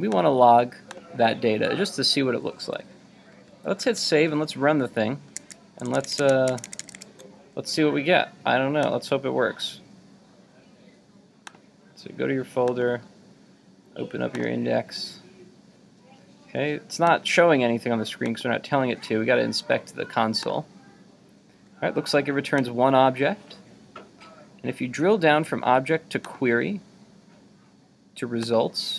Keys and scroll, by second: 3.5 super+s, 4.0 super+Tab, 5.4 super+Tab, 5.5 super+Tab.